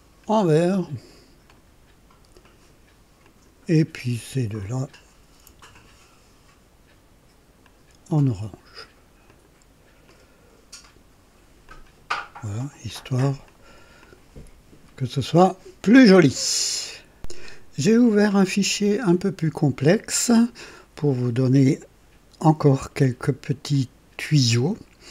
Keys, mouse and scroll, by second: 1.4 click, 2.4 click, 3.2 click, 4.6 click, 7.6 ctrl+click, 9.2 click, 10.1 click, 11.6 click, 12.8 click, 13.4 click, 14.0-16.3 drag, 17.1 click, 18.0-22.6 drag, 23.7-25.1 drag.